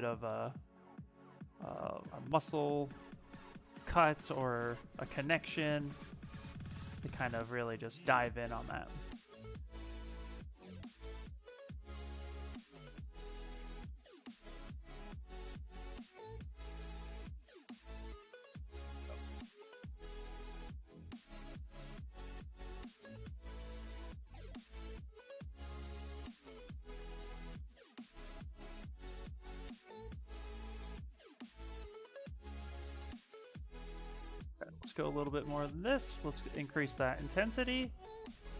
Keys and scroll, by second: 4.4 s, 12.4 s, 15.1 s, 24.3 s, 33.0 s, 34.5 s, 35.9 space.